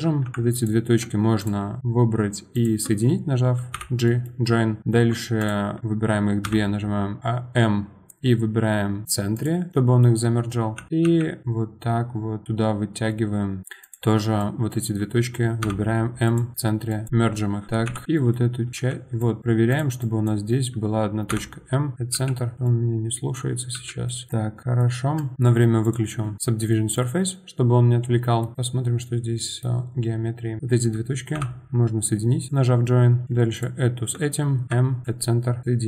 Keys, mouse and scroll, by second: 0.0 1, 0.5 ctrl+click, 1.4 click, 2.5 shift+click, 3.8 j, 4.0 middle click, 4.8 click, 5.4 shift+click, 6.4 m, 9.7-10.8 middle drag, 10.8 g, 14.4 click, 15.6 m, 16.9 click, 17.7 click, 17.8 KP_7, 18.0 g, 19.2 click, 19.7 click, 20.0-21.3 drag, 21.3 m, 22.1 g, 22.5 click, 22.6-23.7 middle drag, 23.7 g, 24.3 middle click, 25.2 click, 25.3-25.8 middle drag, 25.8 click, 26.4-29.1 middle drag, 29.1 scroll up 1, 29.4-30.6 middle drag, 30.6 click, 31.3 j, 32.5 click, 33.5 shift+click, 34.6 m, 35.6 click.